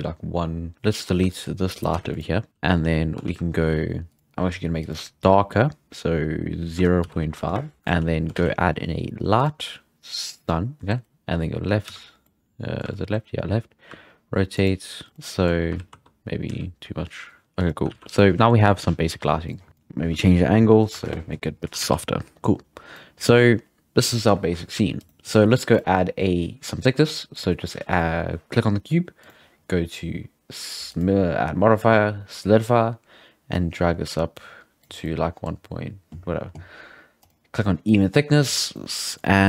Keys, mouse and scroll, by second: 0.8-1.3 scroll down 4, 1.3-1.8 shift+middle drag, 1.8 right click, 1.9 x, 2.5 z, 2.8-3.3 scroll up 4, 3.3 shift+a, 4.1 click, 4.9-8.0 drag, 7.8 alt+a, 7.9 shift+s, 8.0 shift+s, 8.4 shift+a, 10.5 shift+a, 10.8 middle click, 11.9 z, 12.2-13.0 middle drag, 12.8 z, 13.0 z, 13.9 r, 15.1-15.8 middle drag, 18.4 alt+a, 19.4 click, 19.7-21.8 drag, 21.8 alt+a, 22.9-25.0 middle drag, 25.0-25.7 right drag, 25.7-27.1 drag, 27.3 click, 27.8-29.2 right drag, 29.2-35.0 drag, 35.0-37.2 middle drag, 37.2 click, 37.8 middle click, 38.4 alt+a, 38.6 scroll down 2, 38.8-39.4 middle drag.